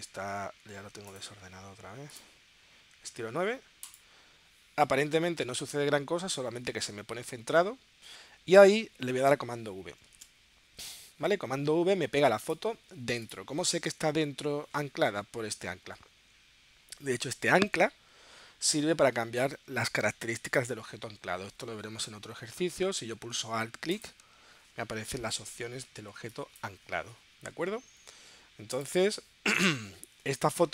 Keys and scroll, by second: 10.4 super+v.